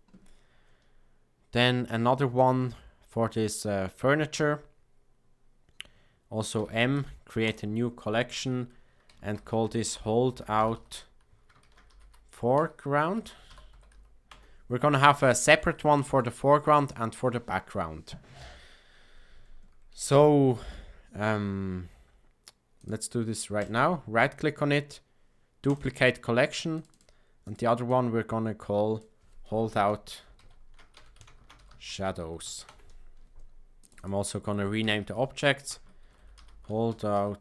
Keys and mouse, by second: 2.3 click, 6.5 m, 22.7 click, 23.6-25.7 right drag, 26.7-33.1 drag, 33.8 click, 33.9-37.4 drag.